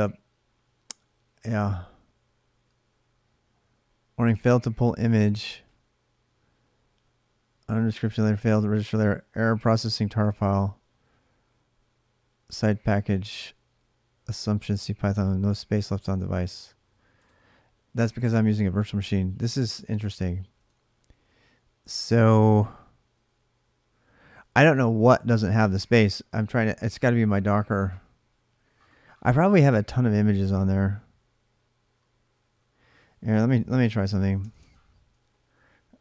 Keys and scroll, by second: 33.5 alt+Tab, 34.2 alt+Tab, 35.8-36.0 typing.